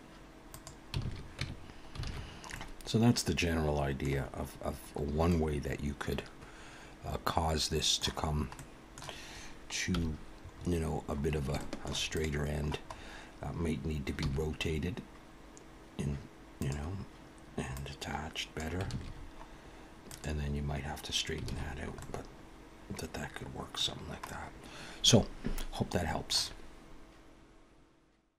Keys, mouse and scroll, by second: 1.0 alt+a, 1.4 Tab, 2.0 alt+a, 2.2-3.0 scroll down 4, 2.5 middle click, 4.2-4.8 scroll down 3, 5.3 middle click, 8.5 middle click, 9.9 KP_1, 10.5-11.3 scroll up 2, 11.3 scroll up 4, 11.9 shift+middle click, 12.1 click, 12.9-13.4 scroll up 2, 14.2 r, 17.7 click, 18.9 alt+a, 19.1-20.1 scroll down 1, 20.1 click, 20.1-20.7 scroll down 3, 21.0-21.5 scroll up 2, 21.5 alt+a, 21.7-22.2 scroll down 2, 22.0 middle click, 23.9 scroll down 2, 24.3 middle click.